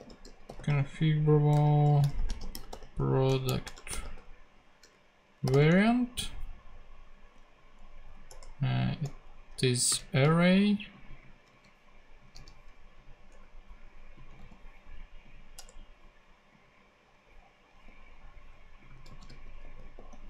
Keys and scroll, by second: 0.0-6.0 typing, 8.3 [, 8.8 Right, 9.9 ,, 11.5 super+c, 12.3 super+d, 13.3 super+Return, 15.5 Return, 17.8 super+g, 19.1 super+c, 19.2 super+f, 19.6 super+g.